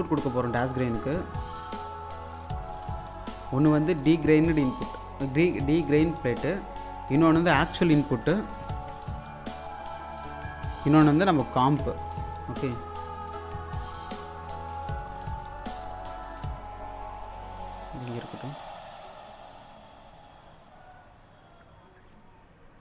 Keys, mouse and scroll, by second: 1.1-5.8 ctrl+drag, 5.8 click, 9.3-10.9 drag, 12.4-14.7 drag, 14.7 scroll down 1, 15.6-22.8 alt+drag.